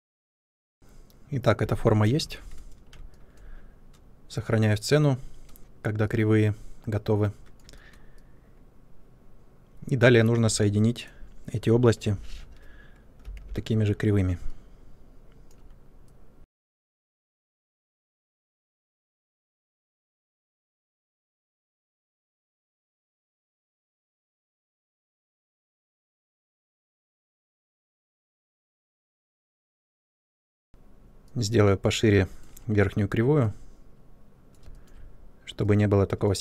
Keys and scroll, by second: 0.4 ctrl+space, 2.1 ctrl+s, 13.4 shift+o, 16.5-19.2 typing, 20.3 shift+o, 20.6 shift+o, 21.3 ctrl+space, 21.5 3, 23.8 ctrl+space, 25.1 ctrl+space, 25.4 3, 30.1 ctrl+space, 30.6 space.